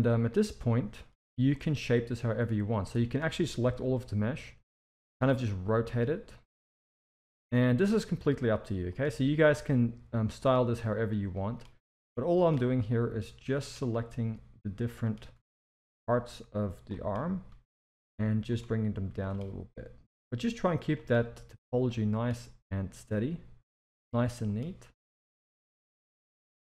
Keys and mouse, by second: 0.4 z, 1.6-2.9 drag, 3.6 r, 5.5 g, 6.9 click, 7.8 r, 9.0 g, 11.4 click, 11.7 g, 12.8 click, 14.0 g, 15.3 r, 16.1 click, 17.5 g, 19.0 click, 19.5 g, 21.9 click, 22.4 g, 24.1 click, 24.9 click, 25.4 g.